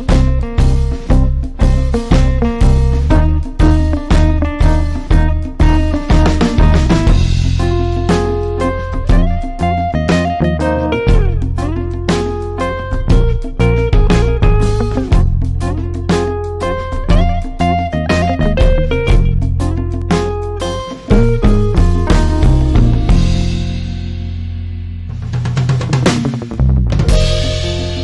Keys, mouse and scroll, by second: 6.1-6.9 scroll down 2, 6.9-7.4 scroll up 2, 7.4-16.8 drag, 10.3-10.6 drag, 25.5-26.2 typing.